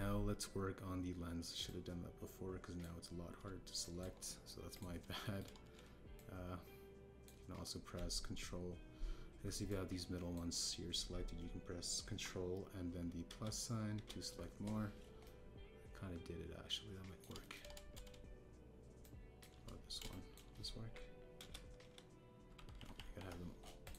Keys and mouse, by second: 0.1 Tab, 2.6-3.8 drag, 4.8 shift+click, 5.7 click, 6.2 shift+click, 7.1-8.2 shift+drag, 10.6 click, 14.2 ctrl+KP_Add, 14.9 ctrl+KP_Add, 16.2-18.1 middle drag, 18.3 shift+click, 20.0 shift+click, 21.0 shift+click, 22.3 ctrl+KP_Add, 22.8 ctrl+KP_Add, 23.7 ctrl+z, 23.9 ctrl+z.